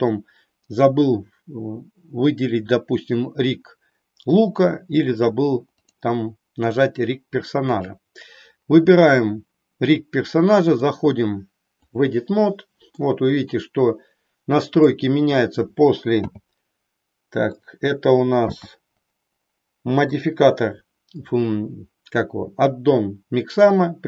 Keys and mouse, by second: 10.6-12.1 drag, 13.0-15.0 middle drag, 16.2 m, 17.5 click, 18.5 n.